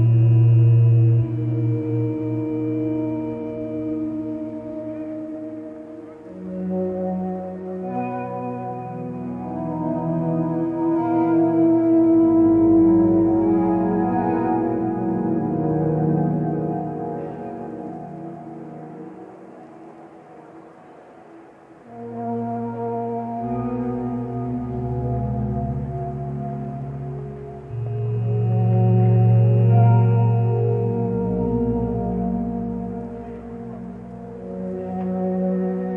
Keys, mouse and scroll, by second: 1.8 click, 11.8 ctrl+space, 26.4 ctrl+space, 29.5 ctrl+space, 30.6 click.